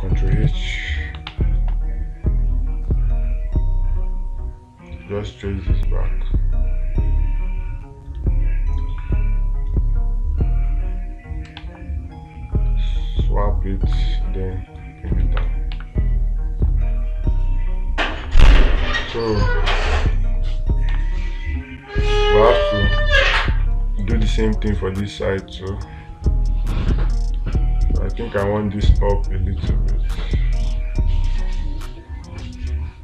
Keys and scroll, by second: 1.7 space, 12.0 ctrl+z, 16.2 space, 19.4 space, 21.3 space, 23.4 space.